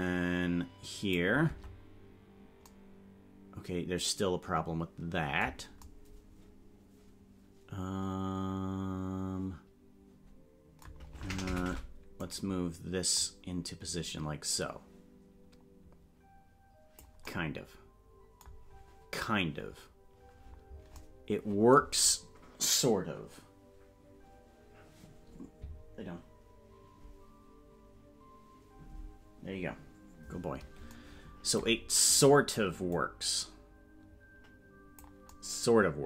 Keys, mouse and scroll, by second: 2.0 Tab, 13.2-17.0 drag, 32.9-35.0 drag.